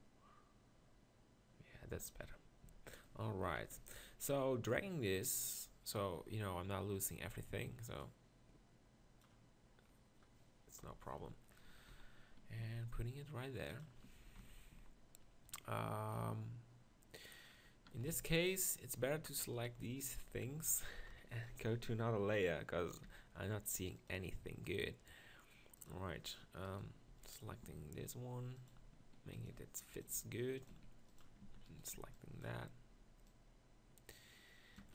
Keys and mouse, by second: 2.2 middle click, 2.7 z, 3.5 KP_1, 3.8 z, 4.3-4.6 middle drag, 10.8 KP_1, 11.2 z, 11.9 z, 12.6 g, 14.4 ctrl+KP_Decimal, 14.7 z, 18.0 z, 21.1 KP_1, 23.1 m, 25.8 click, 27.1 z, 27.6 s, 28.8 g, 29.4 s, 30.0 click, 30.3 g, 30.7 s, 31.4 Tab, 31.9 b.